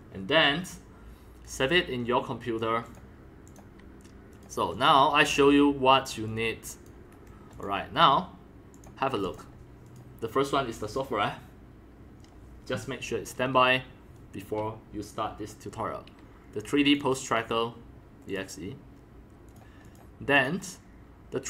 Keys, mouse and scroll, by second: 1.4-2.6 drag, 2.8 click, 3.4 drag, 4.3 click, 4.7 click, 6.3-6.8 drag, 7.0 drag, 7.1 Delete, 7.5 click, 8.7 click, 9.2 click, 9.8 click, 16.9 click, 17.0 click, 18.3 click, 19.5 click, 19.8 click, 20.3 click.